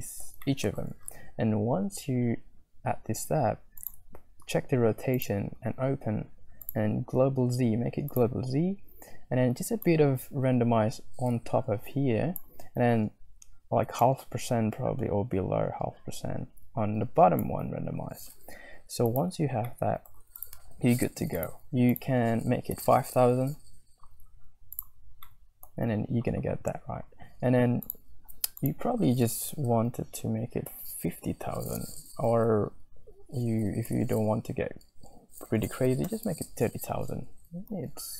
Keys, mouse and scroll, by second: 0.2 middle click, 0.2 scroll up 1, 0.4 shift+middle click, 0.6 shift+click, 5.2 click, 6.7-8.0 middle drag, 6.7-8.0 scroll up 1, 8.0 click, 10.5-13.4 shift+drag, 14.0-17.1 shift+drag, 19.0-20.5 scroll up 8, 19.8 middle click, 20.3 click, 21.4-24.4 drag, 25.3 click, 25.4 middle click, 27.9-37.3 drag, 32.5 Left, 32.6 Left, 32.9 Left.